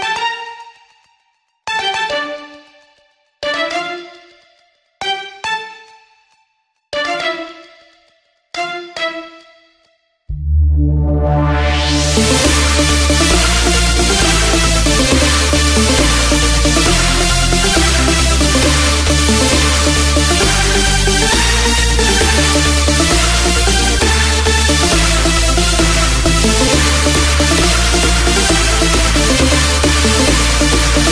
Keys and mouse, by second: 17.3 KP_7, 22.6-26.6 drag, 28.6-31.1 drag.